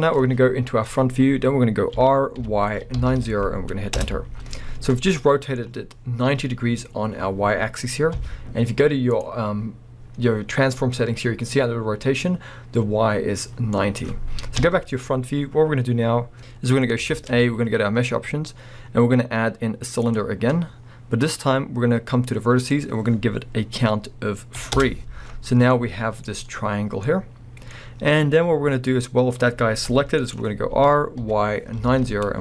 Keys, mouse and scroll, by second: 2.0 r, 4.1 Return, 5.2 middle click, 8.1 n, 9.1 click, 13.8-21.3 middle drag, 19.6 shift+a, 22.6-24.8 drag, 24.8 Return, 25.2 scroll, 25.7-29.9 middle drag, 29.9 g, 30.4 right click, 30.7 r.